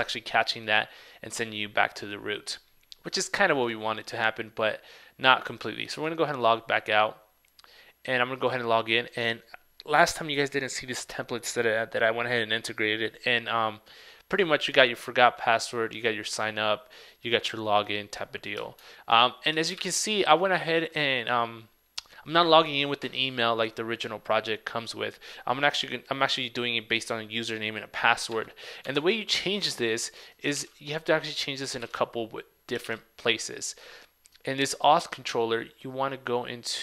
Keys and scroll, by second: 18.9 super+Tab, 28.4 super+Tab, 30.6 super+w, 33.0 super+w.